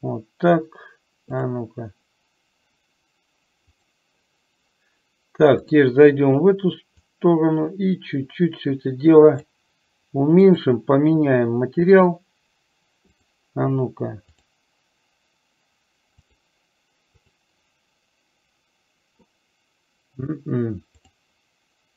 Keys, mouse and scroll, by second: 1.5-4.3 drag, 5.7-21.9 drag.